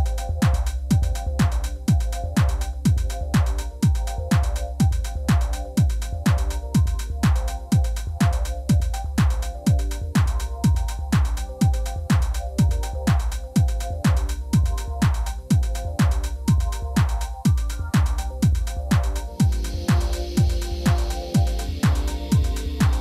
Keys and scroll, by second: 0.8 g, 1.0 x, 3.5 Tab, 4.5 Tab, 4.7 shift+z, 5.7 g, 5.8 y, 10.0 Tab, 11.3 shift+s, 12.2 shift+a, 13.4 g, 14.0 y, 17.6 Tab, 18.4 3, 19.1 y, 20.1 Escape, 20.7 g, 21.1 x.